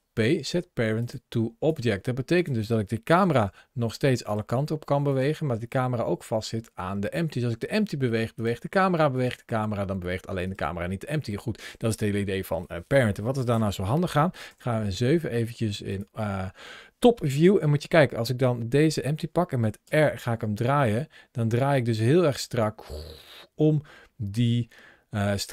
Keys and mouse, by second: 1.5 click, 3.1 g, 4.1 right click, 4.9 click, 5.4 g, 8.2 right click, 9.0 click, 9.2 g, 10.3 right click, 11.3-13.5 middle drag, 14.3 KP_7, 17.3 shift+middle click, 19.7 r.